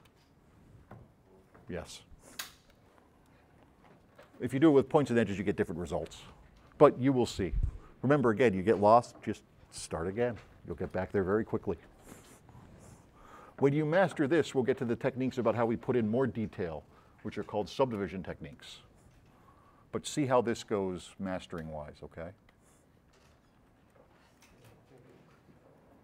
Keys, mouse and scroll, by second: 2.4 s, 2.7-4.3 right drag, 24.0-24.4 drag, 25.0 click.